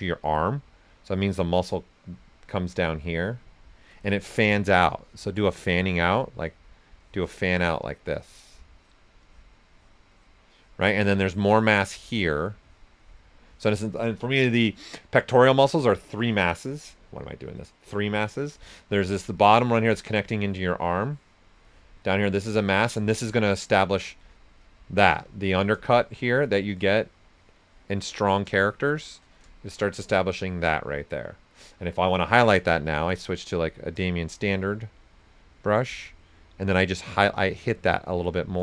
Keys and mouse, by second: 0.9 click, 4.0 right click, 6.3 click, 10.9 right click, 11.5 click, 18.7 right click, 19.4-21.1 drag, 22.0 right click, 22.5 click, 23.7 right click, 25.8-28.1 shift+drag, 28.1 right click, 28.6 shift+click, 29.3 right click, 31.9 b, 33.5-38.6 drag.